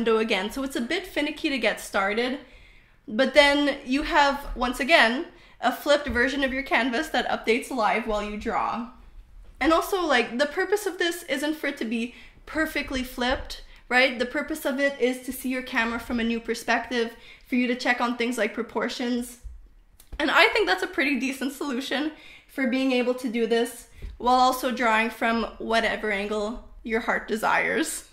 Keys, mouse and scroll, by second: 0.1 click, 3.7 click, 4.6 click, 5.4 click, 5.8 click, 6.3 click, 8.9 click, 9.1 click, 9.5 click, 9.9 click, 10.9 click, 11.2 click, 11.6 click, 11.9 click, 12.5 click, 12.8 click, 13.2 click, 13.4 click, 15.8 click, 16.7 click, 17.3 click, 18.0 click, 18.7 click, 19.3 click.